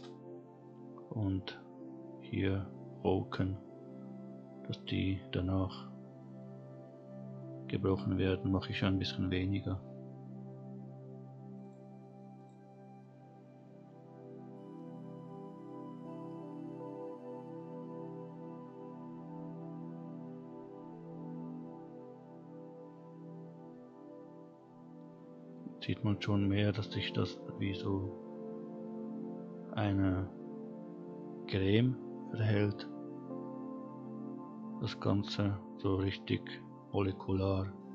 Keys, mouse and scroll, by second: 0.4-0.8 scroll down 3, 3.3-4.9 drag, 11.6 click, 12.4 click, 27.5-28.0 scroll up 3, 29.8 scroll down 1, 32.8-35.5 middle drag, 35.5-37.9 scroll up 1.